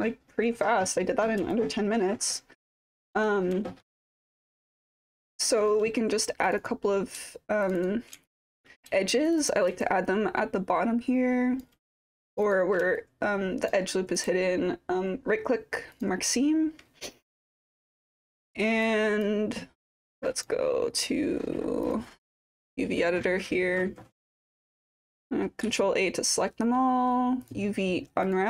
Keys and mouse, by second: 1.5-3.1 alt+drag, 3.6 alt+middle drag, 3.7 alt+drag, 4.2 click, 5.2 alt+click, 5.4-5.8 typing, 6.6 click, 7.8 shift+click, 8.2-8.6 alt+drag, 9.3 shift+click, 9.4 shift+click, 9.8-11.6 alt+drag, 12.4 shift+click, 13.0-13.7 alt+drag, 19.0 click, 19.9 click, 21.8-23.2 drag, 25.6 ctrl+a, 27.4-28.4 drag.